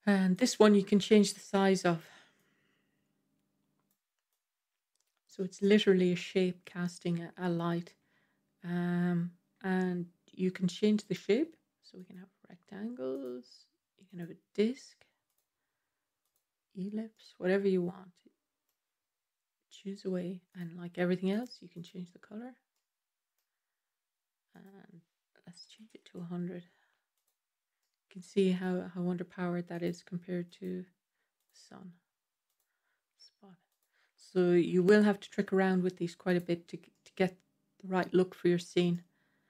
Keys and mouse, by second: 0.2-1.9 drag, 2.4-3.8 drag, 4.3 click, 5.5-6.7 middle drag, 10.9-12.2 drag, 13.1-14.1 drag, 15.1-16.2 drag, 17.0-18.5 middle drag, 22.6 middle click, 24.5-27.1 drag, 25.9 KP_0, 27.7-28.5 middle drag, 29.6 click, 30.4 click, 31.3 click, 32.3 click, 33.5-36.1 drag, 35.1 KP_0, 36.8-37.9 middle drag, 38.8-39.4 middle drag.